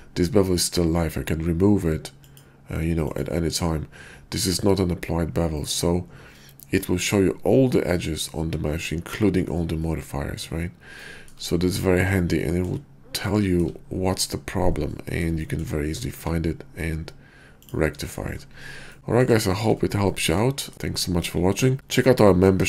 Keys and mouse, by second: 6.2-7.9 middle drag.